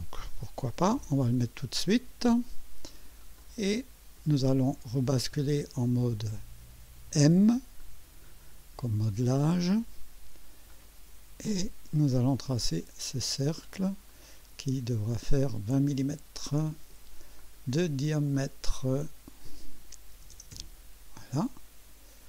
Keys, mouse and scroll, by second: 0.2-1.1 typing, 3.3-4.4 drag, 7.8 click, 10.7 click, 12.5 click, 13.6 click, 14.1 right click, 15.1 click, 17.4 click, 18.3 click, 19.9-20.8 typing.